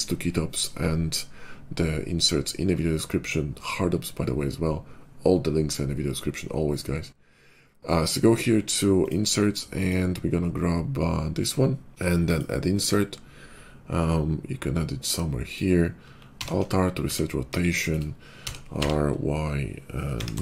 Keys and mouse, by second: 16.3 alt+r, 16.9 `, 17.4 KP_5, 18.3 r.